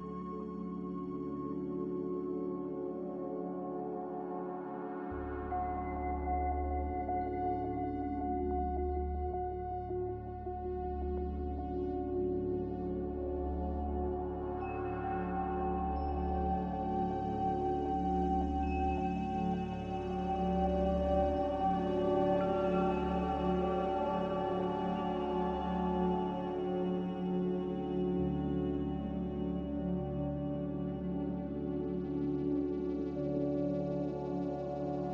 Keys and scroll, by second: 4.0 q, 4.7 q, 6.0 z, 8.3 typing, 8.6 Return, 11.0-12.6 typing, 14.8 typing, 15.0 Return, 16.2 typing, 19.0 z, 20.3 typing, 23.2 b, 25.1 Escape, 27.7-29.4 typing, 31.9-32.6 typing.